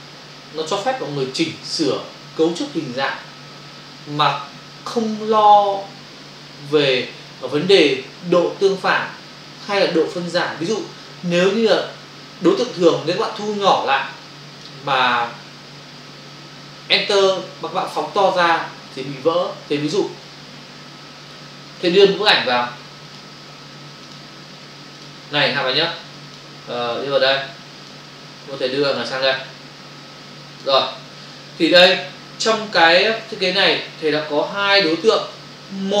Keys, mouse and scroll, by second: 21.8 click, 24.0 click, 26.2 click, 26.8 click, 29.0 click, 31.3 ctrl+-.